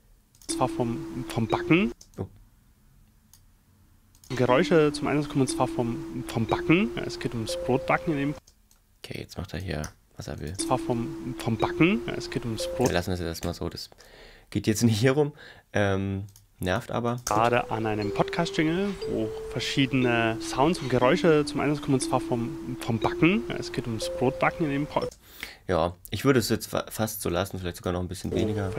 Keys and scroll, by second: 0.4 space, 1.9 space, 4.2 space, 8.4 space, 9.8 f, 10.6 space, 12.9 space, 13.4 Return, 17.3 space, 25.0 space, 28.3 space.